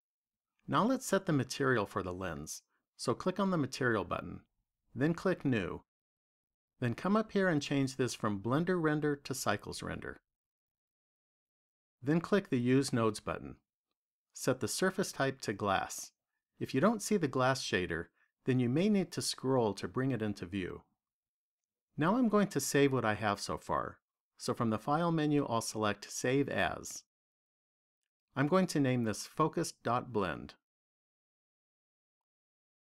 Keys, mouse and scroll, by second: 3.2 click, 4.9 click, 9.5 click, 13.0 click, 15.6 click, 24.6 click.